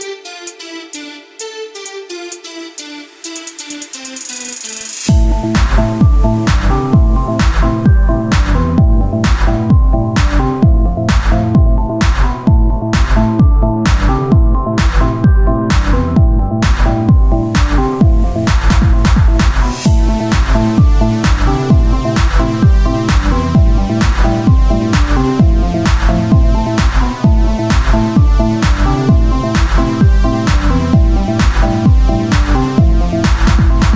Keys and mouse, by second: 0.1 ctrl+Tab, 1.5 ctrl+Tab, 3.3-4.7 drag, 3.3 right click, 3.6 z, 6.5 ctrl+Tab, 7.1-10.5 drag, 7.4-9.4 typing, 10.6-12.2 drag, 11.5 middle click, 11.5-14.3 right drag, 12.2 c, 14.3 click, 15.2 c, 16.0-17.3 drag, 17.6 c, 18.2-21.6 drag, 19.9 c, 20.6 z, 22.9 z, 23.3 click, 23.5 c, 24.6 z, 27.4 z, 29.6 z, 32.2 click, 32.5 z, 33.0-33.9 drag, 33.4 z.